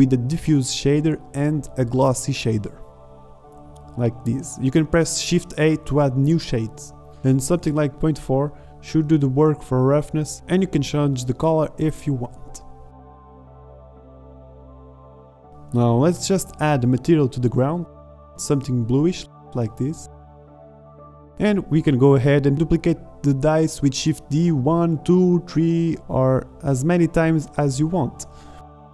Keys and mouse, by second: 0.6 shift+a, 3.0-3.7 drag, 3.8 click, 5.0 middle click, 6.6 click, 8.3 middle click, 11.5-11.8 drag, 12.2 middle click, 14.5 click, 14.9 BackSpace, 15.0 BackSpace, 16.0 ctrl+z, 16.2 click, 18.3 z, 21.6 z, 22.9 shift+d, 27.3-28.0 middle drag, 28.0 drag, 28.2 g, 28.3-28.7 drag, 28.8-28.9 drag.